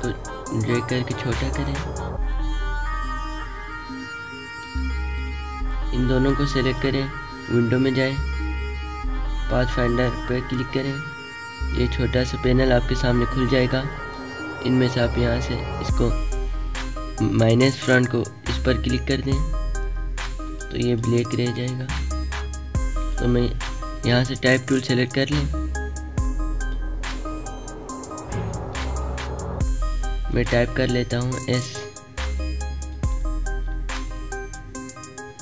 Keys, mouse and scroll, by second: 0.0-7.3 alt+shift+drag, 11.6-15.4 drag, 23.5 click, 23.6 click, 24.5 right click, 25.5 click, 30.6 click, 30.6 click, 31.9 s, 33.2 click, 35.1-35.4 alt+shift+drag.